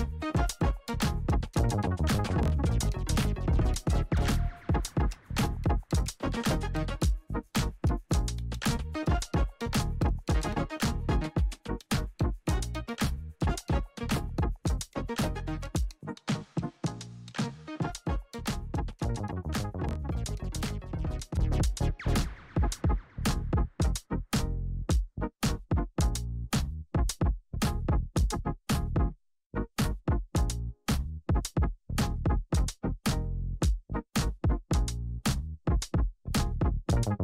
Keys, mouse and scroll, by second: 1.3 click, 2.0 Up, 4.4 ctrl+a, 5.2-5.7 typing, 6.4 scroll down 1, 7.5 click, 10.9 scroll up 1, 14.3 click, 17.9 scroll up 1, 18.3 -, 21.1 click, 23.8-24.5 scroll up 1, 24.9 shift+click, 25.8 alt+scroll up 1, 27.4-33.9 drag, 36.6 scroll down 1.